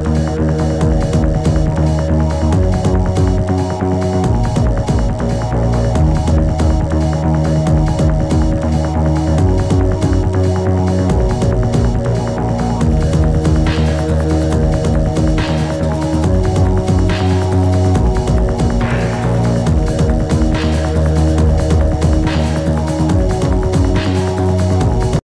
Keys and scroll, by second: 1.9 ctrl+z.